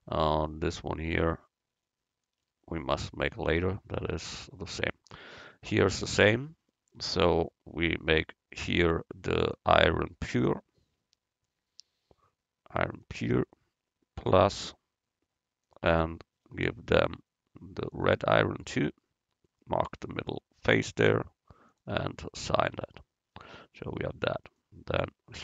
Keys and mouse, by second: 3.4 Tab, 4.2 Tab, 9.5-11.4 drag, 14.5-17.6 drag, 19.5-21.9 right drag, 21.1-22.8 drag, 22.8 Tab, 25.0 Tab.